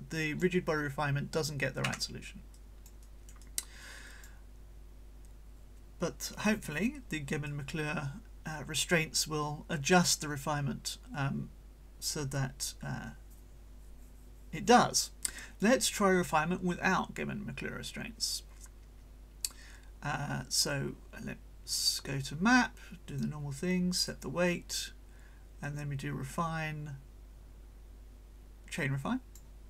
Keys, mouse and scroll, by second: 0.0 click, 1.8 Escape, 2.5-4.4 drag, 3.0-4.4 right drag, 7.5-15.8 drag, 21.7 click, 23.1 click, 24.0 click, 25.6-29.5 drag.